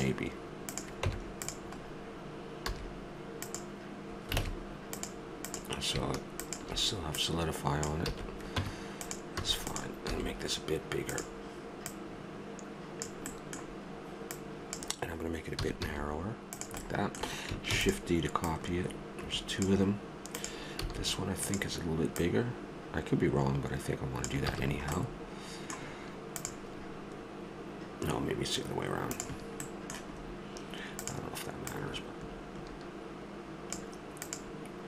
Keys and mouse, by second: 1.0 Tab, 2.7 a, 4.4 ctrl+Tab, 8.1 a, 8.6 Tab, 9.4 a, 10.1 s, 11.8-13.4 drag, 13.4-15.6 middle drag, 15.6 click, 15.6 s, 16.9 middle click, 17.7 shift+d, 18.5-20.8 drag, 20.8 s, 21.1-24.0 drag, 24.5 a, 24.7-26.5 middle drag, 29.6-31.0 middle drag, 31.0-33.5 drag, 34.2-34.8 drag.